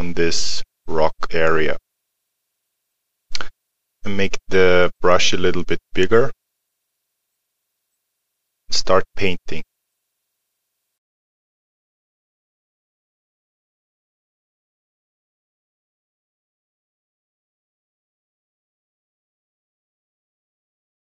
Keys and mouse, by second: 1.3 click, 6.4 click, 10.9 click, 16.9 click, 18.5 middle click, 18.7 click.